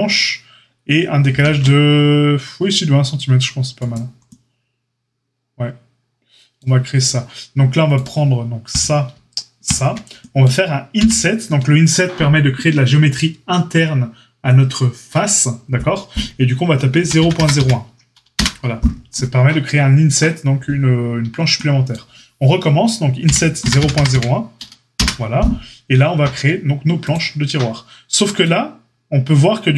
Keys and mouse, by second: 1.2 ctrl+r, 7.9-8.7 drag, 10.9 i, 23.2 i, 26.9-29.7 drag.